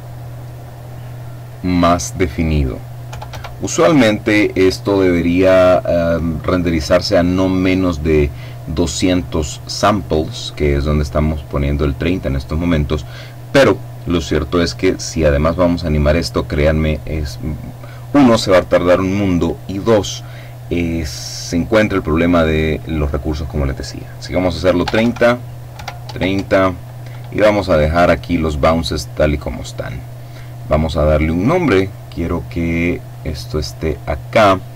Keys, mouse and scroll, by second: 2.6 KP_3, 2.8 KP_0, 24.3 Tab, 24.5 KP_3, 25.2 KP_0, 25.5 Tab, 28.7 click, 29.8-31.0 scroll up 1, 31.0 click, 32.6 click.